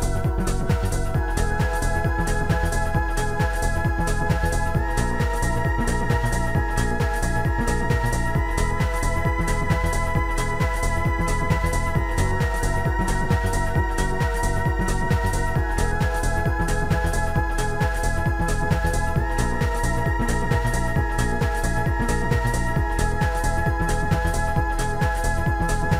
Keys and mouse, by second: 0.9 shift+click, 1.2 shift+click, 2.7 shift+click, 3.1 right click, 3.1 shift+click, 3.9 shift+click, 6.1 click, 7.1 Tab, 9.0 Tab, 11.9 click, 13.3 click, 18.0 click, 19.2 shift+click, 21.3 shift+click, 23.5 shift+click, 25.7 click.